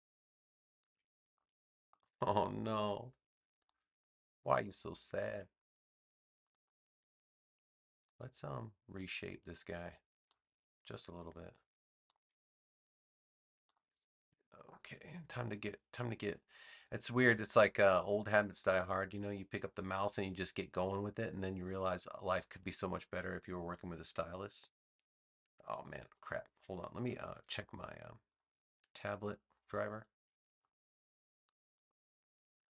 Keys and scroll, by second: 5.2 a.